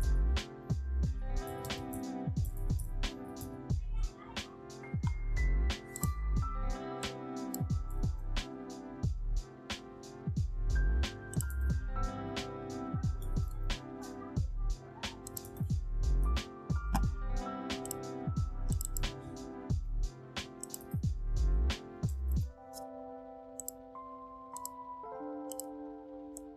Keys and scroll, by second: 0.0-3.8 typing, 7.8 t, 11.4 ctrl+a, 13.1 6, 13.4 Return, 15.3 ctrl+a, 15.9-16.8 typing, 19.6 ctrl+a, 21.9-22.7 typing.